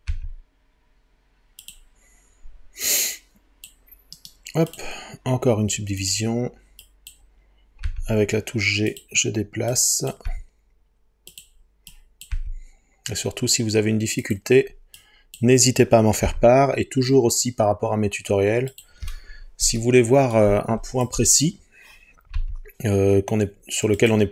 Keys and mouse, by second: 0.1 g, 1.6-3.0 drag, 4.3 right click, 6.0 click, 7.9 g, 8.9 click, 10.3 g, 11.3 click, 12.3 g, 14.2 click, 16.3 g, 18.7 click, 22.4 g, 24.0-24.3 drag.